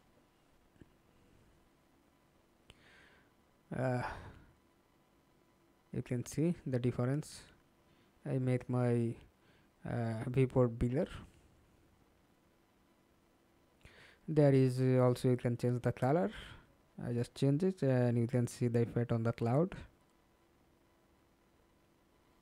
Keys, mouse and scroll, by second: 0.4-2.8 scroll down 1, 4.0-5.0 scroll down 1, 5.0-9.4 scroll down 1, 9.4-11.9 scroll down 6, 11.9-12.6 scroll down 3, 12.6-15.6 scroll down 2, 20.2-21.4 scroll down 15, 21.7-22.4 scroll up 12.